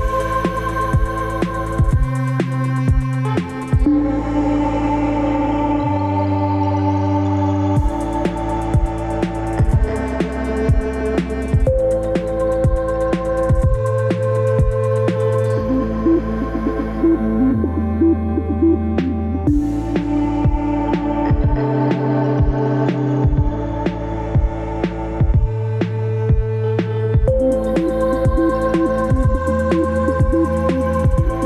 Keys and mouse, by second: 0.6 ctrl+z, 8.2 click, 9.2-9.9 middle drag, 12.0 Tab, 13.0 a, 13.6 e, 16.8-18.8 drag, 19.1-20.5 drag, 21.9-26.0 drag, 26.3 click, 27.3 Tab, 27.3-27.6 middle drag, 27.8 Tab, 29.2 click, 29.8 click, 31.0 Tab.